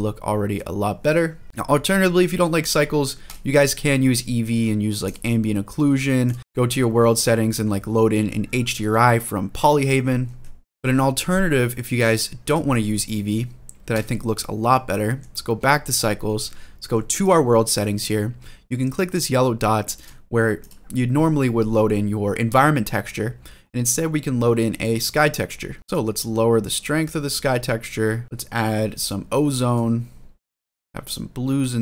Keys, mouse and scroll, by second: 1.4-2.3 scroll up 6, 2.4-3.2 drag, 4.8 click, 6.0-7.7 drag, 10.0 ctrl+z, 10.6 middle click, 11.8 click, 12.2 click, 12.8-13.9 drag, 14.7 middle click, 17.0 click, 19.7 click, 20.4-24.9 drag, 25.6 middle click, 25.8 middle click, 26.0-28.2 drag, 28.8 click, 30.9 click.